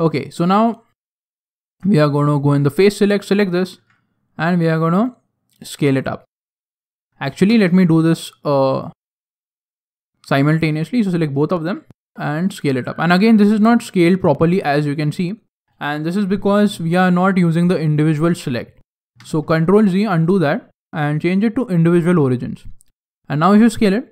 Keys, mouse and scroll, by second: 1.2 alt+right click, 2.3 click, 3.2 alt+right click, 3.7 s, 7.6 ctrl+z, 8.7 alt+shift+right click, 10.2 s, 19.4 ctrl+z, 20.5 click, 22.9 s.